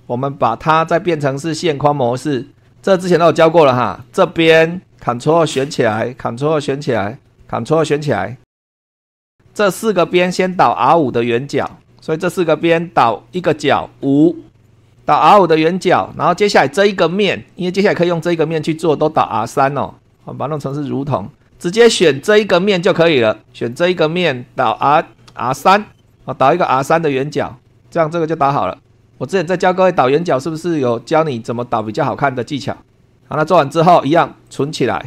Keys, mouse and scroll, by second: 1.5 click, 2.4 click, 2.7-3.8 scroll up 2, 3.8 click, 5.2 ctrl+click, 6.7 ctrl+click, 7.8 ctrl+click, 11.7 super+2, 13.4 click, 13.8 5, 15.8 shift+middle click, 19.5 super+2, 20.1 click, 20.6 click, 21.9-23.4 middle drag, 23.6 click, 24.7 click, 25.3 3, 26.1 click, 26.8-28.9 middle drag, 29.7 shift+middle click, 34.4 click.